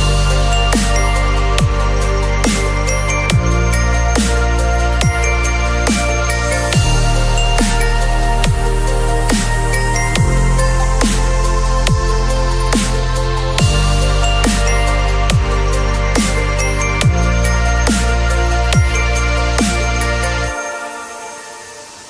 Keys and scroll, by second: 1.0 space, 5.7 ctrl+t, 15.3 ctrl+u.